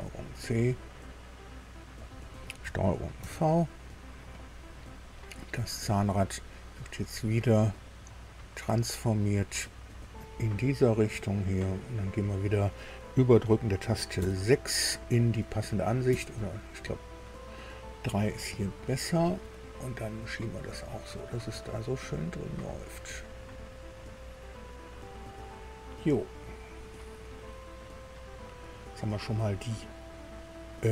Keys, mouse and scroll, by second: 2.0 click, 3.2 ctrl+v, 4.5-5.3 scroll down 3, 5.6 click, 7.8 right click, 9.2 click, 10.9-12.7 drag, 14.2 KP_6, 16.1 KP_3, 18.8 shift+middle click, 20.2-24.6 drag, 24.8-25.2 scroll up 1, 27.2 click, 28.0 scroll down 1, 28.4-29.5 middle drag, 29.6-30.9 middle drag.